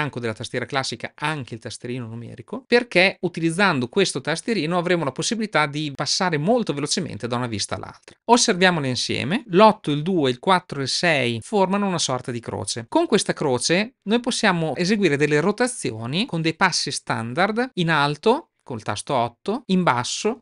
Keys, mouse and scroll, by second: 19.3-20.4 typing.